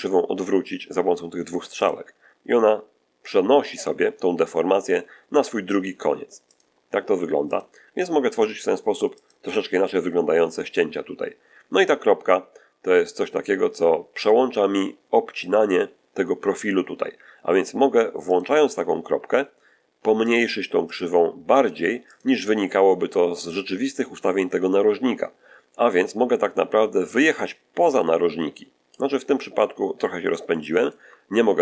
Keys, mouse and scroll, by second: 1.7 click, 6.4 click, 7.4 click, 8.2 click, 9.1 click, 18.2 click, 20.2 click, 20.8 click, 21.5 click, 22.0 click, 27.0-29.0 drag, 29.4-29.8 scroll up 1, 29.9-30.2 scroll down 1, 30.4 shift+middle click.